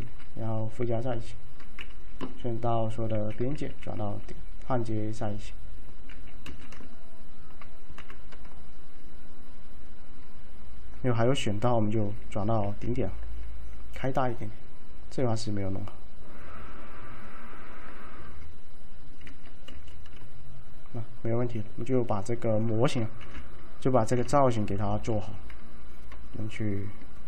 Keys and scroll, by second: 0.1 alt+z, 3.2 ctrl+a, 3.8 alt+1, 6.2 ctrl+a, 8.1 F3, 12.8 alt+1, 19.3 ctrl+a, 23.3 t, 24.3 f, 26.7 typing.